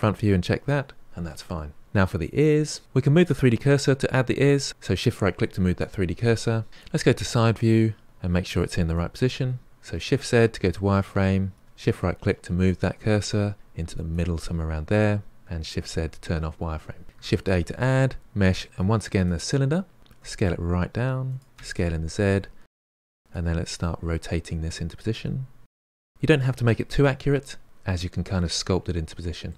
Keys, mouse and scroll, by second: 2.4 middle click, 4.7 shift+right click, 6.9 KP_3, 9.9 shift+z, 11.5-14.1 shift+right drag, 15.5 shift+z, 17.2 shift+a, 21.2 s, 21.9 s, 23.1 KP_1, 23.2 r, 23.5 g, 24.0 s, 24.4 middle click, 25.2-28.3 typing, 28.3-29.5 middle drag.